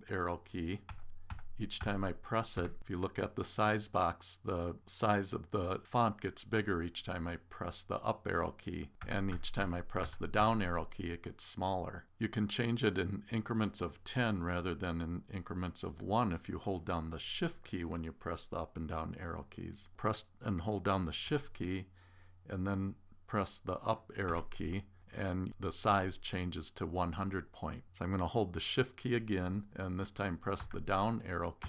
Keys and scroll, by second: 24.3 shift+Up.